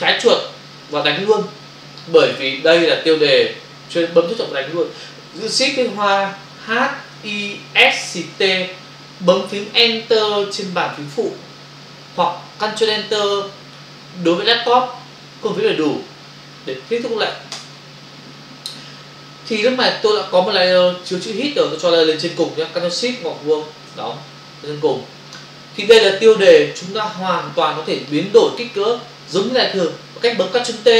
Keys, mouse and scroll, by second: 0.9 click, 17.5 Return.